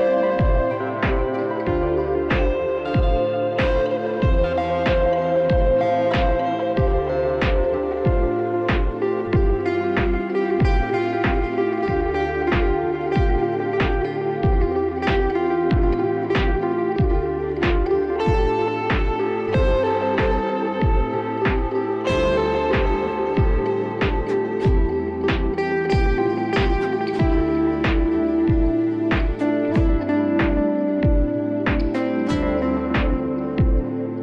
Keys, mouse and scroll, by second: 1.6 click, 4.0 click, 7.3 click, 9.7 click, 11.3 click, 13.5 click, 14.3 click, 14.5 click, 15.2 click, 15.8 Right, 16.0 Right, 16.0 Down, 16.1 Down, 16.3 Down, 16.8 Down, 17.4 click, 18.3 click, 18.3 click, 18.8 click, 19.6 click, 20.3 click, 22.4 click, 24.3 click, 27.2 click, 28.6 click, 29.6 alt+scroll, 31.4 click, 31.7 click, 31.8 click, 31.9 click, 32.7 click, 33.0 click, 33.2 click, 33.4 click, 33.5 click, 34.0 click.